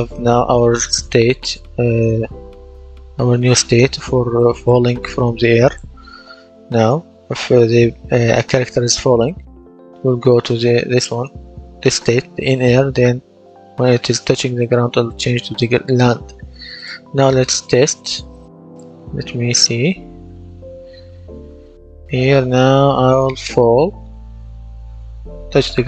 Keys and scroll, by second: 18.5-20.0 typing.